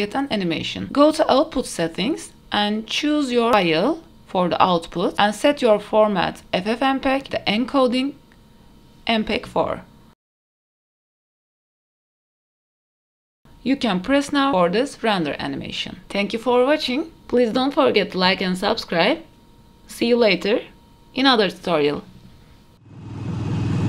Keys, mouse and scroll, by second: 1.2 click, 1.9-3.7 scroll down 1, 3.8-5.9 drag, 6.7 scroll down 1, 7.8 click, 8.2-9.2 scroll down 3, 9.2-11.7 drag, 9.2-9.9 scroll down 1, 13.0-17.1 drag.